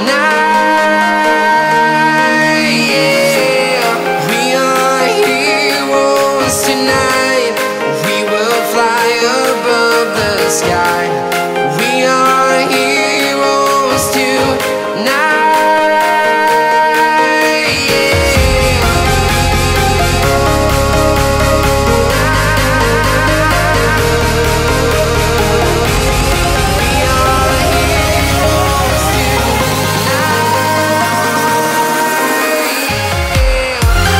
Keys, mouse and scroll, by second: 3.0-4.5 right drag, 4.5 scroll up 1, 4.9-7.0 right drag, 7.2 click, 8.0 right click, 8.3 click, 9.2 right click, 9.8 click, 10.7 right click, 10.7 right click, 12.9 click, 14.1 right click, 14.7 click, 15.5 right click, 16.3 click, 17.0 right click, 17.5 click, 18.4 right click, 19.8 click, 20.8 right click, 21.4 click, 22.2 right click, 23.4 click, 24.5 click, 24.7 right click, 25.2 click, 26.3 right click, 27.1 scroll up 1, 27.2 right click, 28.1 click, 29.3 right click, 29.8 click, 30.8-32.1 right drag, 32.1 click, 32.4 scroll down 1, 32.9-34.1 right drag.